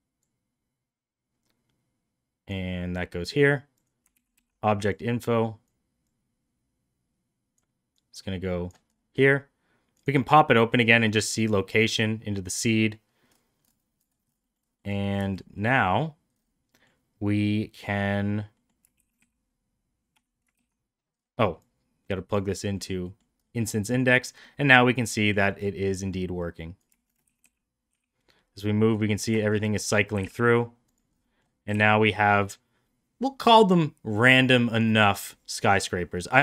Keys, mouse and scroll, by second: 2.6 click, 3.8 click, 4.1 ctrl+c, 4.4 ctrl+v, 4.9 click, 6.1-7.5 drag, 8.0 click, 11.4 click, 14.5 middle click, 14.7 middle click, 15.2 shift+middle drag, 15.5 middle click, 15.8 middle drag, 16.7 middle click, 18.6 middle click, 19.1 shift+d, 20.6 ctrl+z, 21.7 click, 22.8 middle click, 23.1 middle click, 23.5-24.3 middle drag, 24.5-25.4 middle drag, 25.5 middle drag, 26.0 middle drag, 26.6 drag, 27.0 shift+middle click, 27.3 shift+d, 29.5 shift+middle click, 29.7 middle click, 30.2 g, 31.3 middle click, 31.7 g.